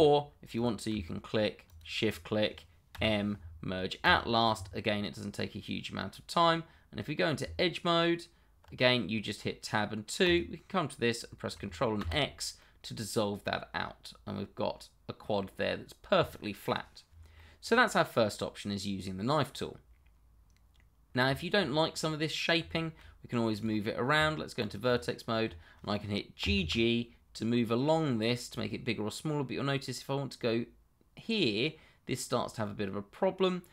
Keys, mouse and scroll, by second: 0.5 click, 1.6 shift+click, 2.9 m, 4.0 click, 5.0 middle click, 7.4 Tab, 10.2 click, 12.0 ctrl+x, 12.6 middle click, 16.6 middle click, 17.0-17.3 scroll down 1, 17.3 middle click, 20.3 middle click, 21.3 shift+middle click, 21.4 middle click, 21.6-22.0 scroll up 1, 22.0 middle click, 22.9 shift+middle click, 23.5 click, 24.1 Tab, 24.8 click, 25.2-25.7 scroll up 1, 26.4 g.